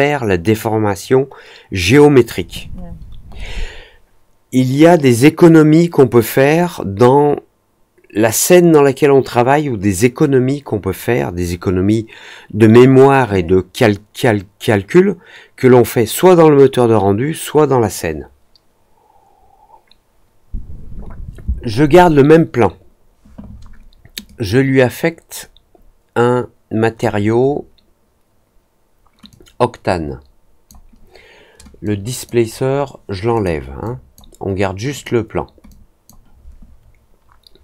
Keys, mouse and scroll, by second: 24.2-26.9 drag, 29.2-30.6 drag, 31.8-32.2 drag, 33.3 click, 33.8-34.1 drag, 34.9 click, 35.6 click.